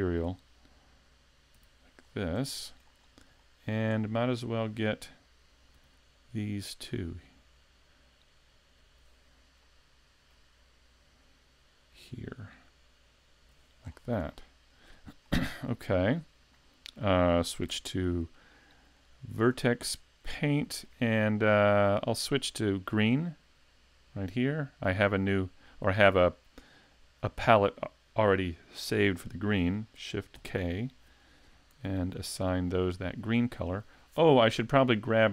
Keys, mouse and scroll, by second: 1.6 l, 2.0 scroll down 2, 2.5 shift+middle click, 3.4 shift+middle click, 4.0-4.9 scroll up 3, 5.8 l, 6.9 l, 8.8 l, 9.6 middle click, 11.9 l, 13.4 l, 13.8 scroll down 4, 14.3 middle click, 15.2 shift+middle click, 15.9 middle click, 16.5 shift+middle click, 17.7 Tab, 18.9 shift+middle click, 20.3 shift+middle click, 23.2 click, 30.3 shift+k, 31.7 a, 32.4 middle click.